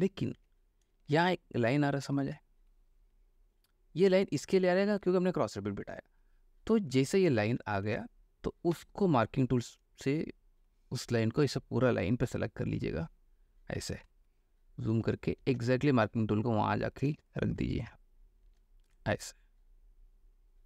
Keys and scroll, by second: 0.5 ctrl+d, 1.1 ctrl+space, 5.2 ctrl+alt+space, 7.1 ctrl+alt+space, 8.9 m, 14.2 ctrl+space, 16.2 ctrl+shift+space, 17.3 ctrl+space.